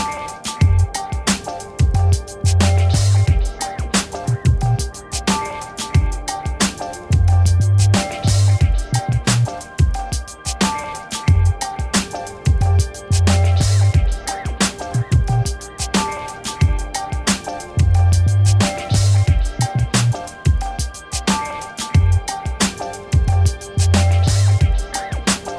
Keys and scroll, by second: 8.8 b, 20.5 ctrl+-.